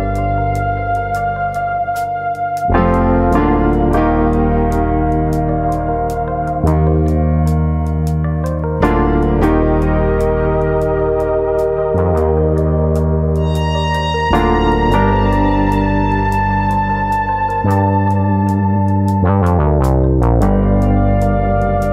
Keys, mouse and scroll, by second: 0.5 click, 0.9 click, 4.3 shift+middle click, 4.7 click, 5.5 click, 8.3 click, 8.8 click, 11.2-11.7 scroll down 3, 11.5 middle click, 12.3 middle click, 13.1 scroll up 1, 13.3 shift+middle click, 13.6 middle click, 14.5 click, 15.0 shift+click, 15.7 g, 16.7 click, 16.9 middle click, 17.5 middle click, 18.8 click, 19.1 shift+click, 19.8 g, 20.8 click, 20.9 middle click, 21.2 middle click, 21.4 Tab.